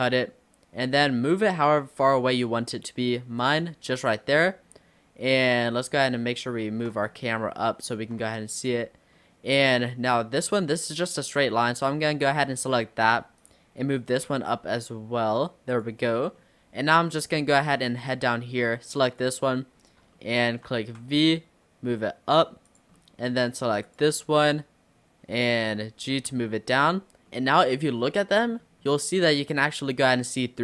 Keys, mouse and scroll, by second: 3.9 middle click, 4.4-5.1 scroll down 3, 5.4 click, 5.8-6.4 scroll down 5, 6.4 shift+middle click, 7.1-7.6 scroll up 5, 7.6-10.1 shift+middle drag, 10.1-11.8 scroll up 4, 11.8 click, 13.4 click, 14.3 g, 16.0-16.4 scroll down 5, 16.4 middle click, 17.3-17.7 scroll up 1, 17.8 click, 19.1 click, 19.8-20.2 scroll up 2, 20.2 shift+middle click, 20.8 v, 23.0 middle click, 23.9 click, 25.4 click, 26.1 g, 27.3-28.8 middle drag, 28.8-29.2 scroll up 2, 29.2 middle click, 30.1-30.6 scroll down 1.